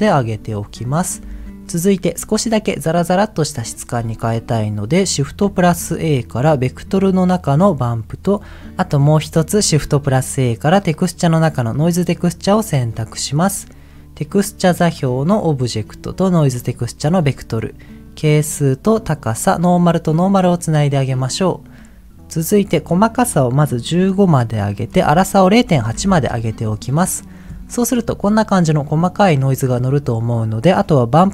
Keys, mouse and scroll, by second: 3.7 click, 4.8 scroll down 2, 5.0 middle click, 5.6 shift+a, 8.7 click, 9.5 shift+a, 13.1-13.9 scroll down 1, 13.9-14.2 scroll down 1, 14.2 middle click, 15.1 click, 15.3-16.6 drag, 16.8 middle click, 17.0-17.9 scroll up 2, 17.9 scroll up 1, 18.0 click, 19.7 click, 23.3-24.3 drag, 24.7-26.2 drag.